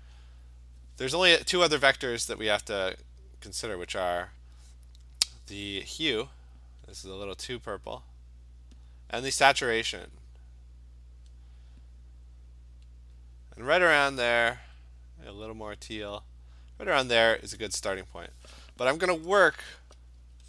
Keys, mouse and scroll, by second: 0.2 click, 1.0 click, 6.8 click, 8.8 click, 11.3 click, 13.2 click, 16.0 click, 17.7 click, 19.1-20.0 ], 20.2 ].